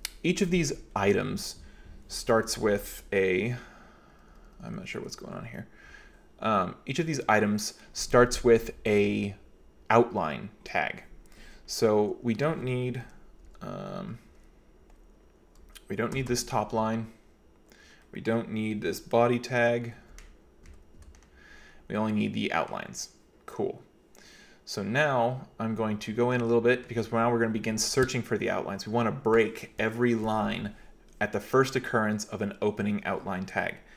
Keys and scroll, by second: 0.4 typing, 2.7 Escape, 2.9 Escape, 3.2-4.8 typing, 5.9 j, 6.5 k, 7.1 k, 13.2-16.3 typing, 19.8-21.0 typing, 25.1-26.9 typing.